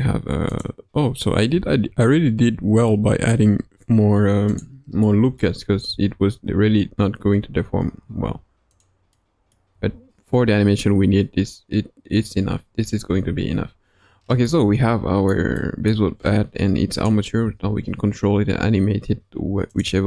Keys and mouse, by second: 0.4 click, 2.8-3.3 middle drag, 5.0 middle click, 5.6 r, 8.7 click, 9.1 middle click, 9.7 r, 13.0 g, 14.5-15.3 middle drag, 15.5-15.9 middle drag, 17.3 r.